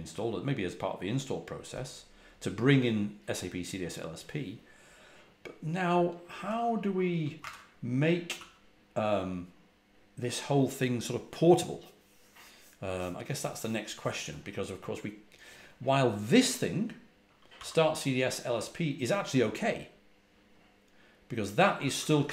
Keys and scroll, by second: 6.4 typing, 8.3 j, 17.2-18.0 typing, 21.5-22.3 typing.